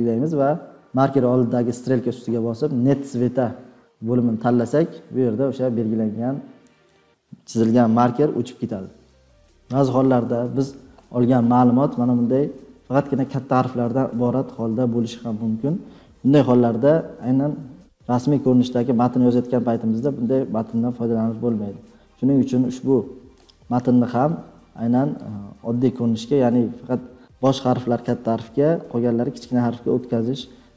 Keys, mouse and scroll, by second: 4.8 click, 9.2 click, 25.1-27.2 drag.